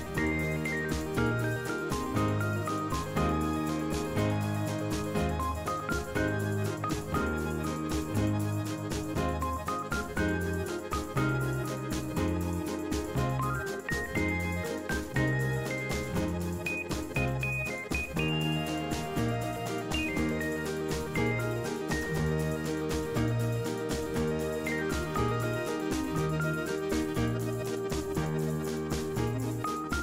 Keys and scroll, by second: 17.2 f.